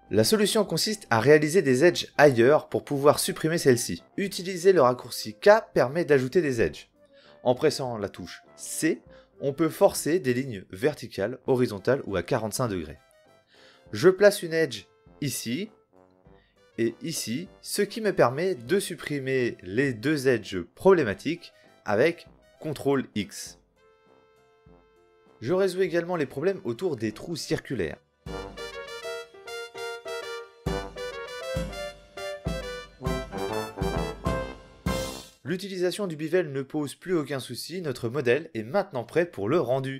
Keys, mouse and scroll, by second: 1.5 l, 2.5 ctrl+i, 3.6 h, 6.3-7.7 middle drag, 7.7 KP_1, 9.5 k, 16.4 KP_1, 16.6 k, 24.0 ctrl+x, 24.4 Tab, 28.5 middle click, 28.9 middle click, 29.1 Tab, 29.2 KP_1, 29.7 n, 30.3 k, 30.7 k, 31.5 ctrl+x, 31.5 Tab, 32.0 Tab, 32.2 KP_1, 32.6 k, 33.1 k, 34.0 ctrl+a, 34.1 ctrl+Tab, 35.8 ctrl+x, 36.6 Tab.